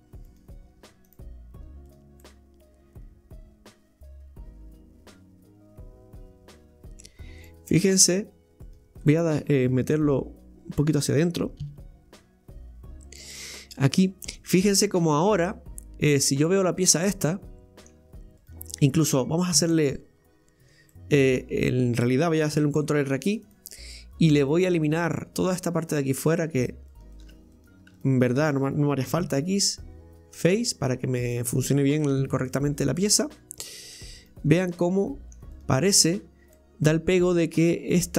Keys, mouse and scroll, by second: 0.3 right click, 1.1 w, 1.9 right click, 2.3-5.2 middle drag, 7.2 scroll up 1, 7.4-8.6 middle drag, 8.6 right click, 9.1-11.7 middle drag, 11.7 g, 13.6-14.4 middle drag, 14.4 right click, 14.9-17.9 middle drag, 18.4 right click, 18.7 right click, 19.8 Tab, 20.2-21.0 scroll up 2, 21.0-22.5 middle drag, 22.5 ctrl+r, 24.6 click, 25.5 right click, 25.8 alt+shift+right click, 26.0 alt+shift+right click, 26.3 alt+shift+right click, 26.6 alt+shift+right click, 26.9 alt+shift+right click, 27.1 alt+shift+right click, 27.5 right click, 28.0 alt+shift+right click, 28.2 alt+shift+right click, 30.4 x, 30.8-31.3 scroll down 3, 31.3 middle click, 32.2 Tab, 32.5-34.2 middle drag, 34.2 right click, 34.6-35.5 middle drag, 35.5 right click, 36.1 click, 36.6-38.1 middle drag.